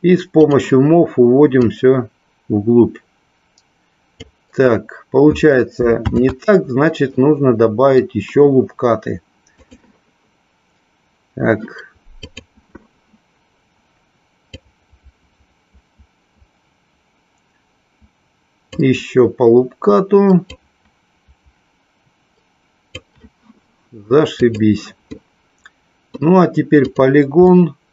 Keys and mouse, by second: 0.4 click, 1.6-4.2 drag, 7.2 middle click, 9.7 click, 12.2 click, 14.7-18.7 drag, 20.6-22.9 drag, 24.4 click, 25.2-26.3 middle drag, 26.8 click, 27.4-27.9 middle drag.